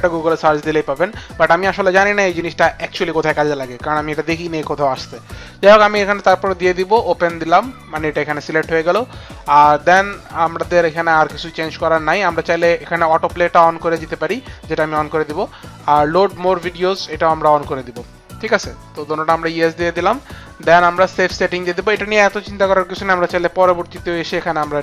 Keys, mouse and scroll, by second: 7.3 click, 13.9 click, 17.4 click.